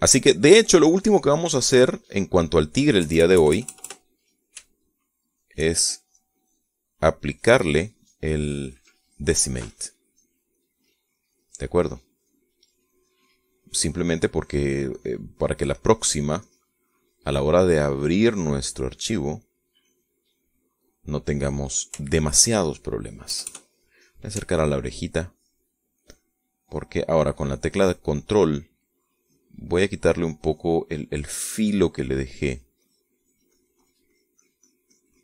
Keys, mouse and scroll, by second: 0.1-3.3 shift+drag, 3.9 KP_Add, 5.7 shift+middle click, 7.3 click, 8.1 click, 8.7 click, 9.2 click, 9.8 click, 10.5 shift+click, 11.1-12.5 drag, 12.6 middle click, 13.8-17.7 drag, 17.7 middle click, 20.7 click, 21.5 middle click, 22.4 middle click, 25.4 ctrl+click, 26.2 ctrl+click, 26.9 ctrl+click, 27.5 ctrl+click, 28.1 ctrl+click, 29.2 ctrl+click, 30.1 ctrl+click, 30.7 ctrl+click, 31.3-32.5 ctrl+drag.